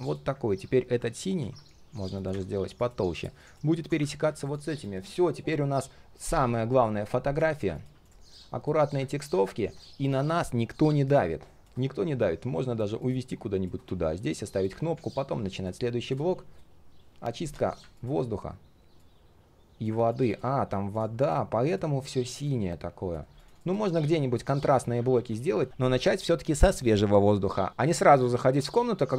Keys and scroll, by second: 1.4 ctrl+z, 14.7 ctrl+z, 21.0 ctrl+alt+space.